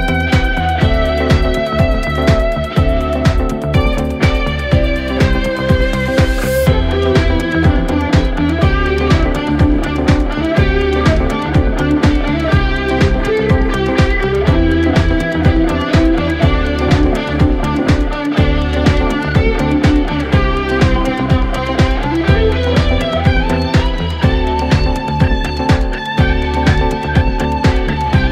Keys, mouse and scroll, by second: 1.2 g, 4.0 click, 4.4-5.1 scroll up 4, 5.1-14.5 typing, 17.6 e, 19.1 r, 19.9 ctrl+z, 20.0 ctrl+z, 20.7-23.2 typing, 24.7 ctrl+z, 24.9 ctrl+z, 25.4-28.3 typing.